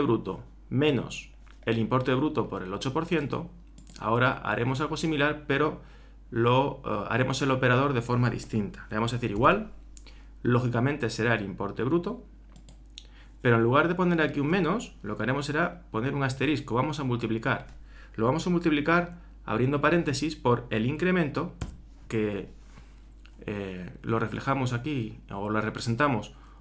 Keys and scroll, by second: 9.4 shift+0, 19.9 shift+8.